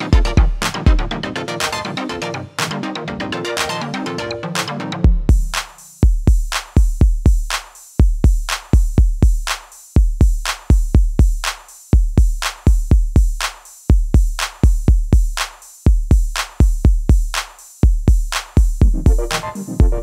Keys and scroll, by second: 14.4 ctrl+c, 17.3 Delete.